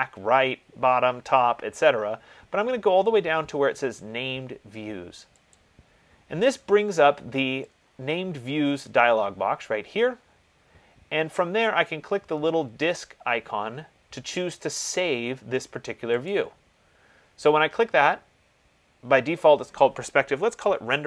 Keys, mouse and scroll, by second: 5.9 click, 8.9 click, 16.5 click.